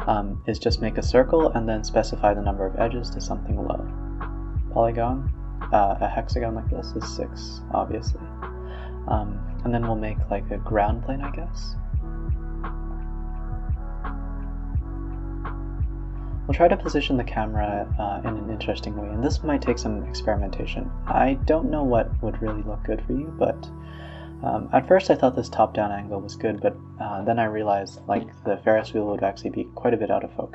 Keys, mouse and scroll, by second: 1.5 click, 2.5 shift+click, 3.1 alt+p, 4.0 click, 4.1 r, 5.2 middle drag, 5.4 scroll down 3, 5.6 middle drag, 5.9 click, 6.1 s, 6.5 middle drag, 6.8 shift+a, 8.0 g, 8.9 s, 9.7 middle click, 10.0 g, 10.7-11.7 middle drag, 11.7 ctrl+alt+KP_0, 12.2 s, 13.1 click, 13.2 g, 14.7 scroll up 1, 15.0 g, 15.5 r, 16.7 g, 17.3 g, 18.8 g, 19.7 g, 20.5 r, 21.3 g, 22.6 g, 22.9 z, 23.7 click, 24.6-25.0 scroll up 3, 26.2 click, 27.5 click, 28.1-29.7 drag.